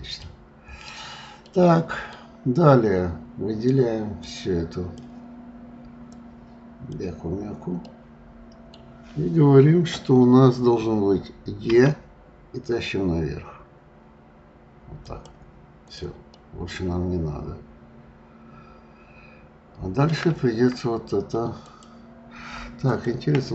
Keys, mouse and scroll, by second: 0.2-1.3 scroll down 7, 1.3-4.3 middle drag, 4.3 click, 6.1 click, 7.7-10.8 middle drag, 15.2 click, 15.8 click, 16.3-19.4 middle drag, 21.6 click, 22.8-23.5 drag.